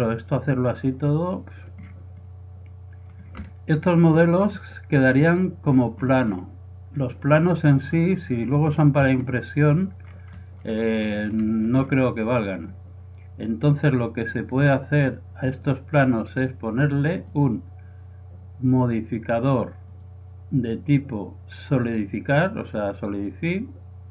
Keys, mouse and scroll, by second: 1.1 middle click, 4.0 middle click, 4.4 click, 4.6 middle click, 6.1 middle click, 6.4 click, 6.5 middle click, 6.6 click, 6.7 middle click, 7.0 click, 7.4-8.7 drag, 8.3-10.3 middle drag, 10.8 middle click, 11.5 middle click, 12.2-14.0 middle drag, 14.6-16.4 drag, 17.2-19.1 drag, 20.0-21.8 drag.